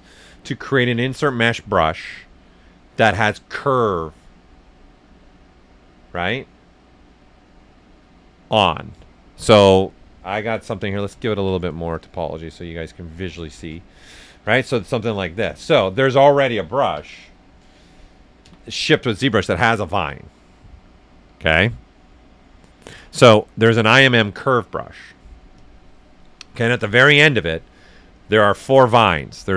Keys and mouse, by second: 10.7 ctrl+d, 11.9 click, 12.3 right click, 13.1 s, 13.2 click, 13.7 shift+right click, 15.5 ctrl+right click, 16.9 b, 18.4 i, 25.5-28.1 drag.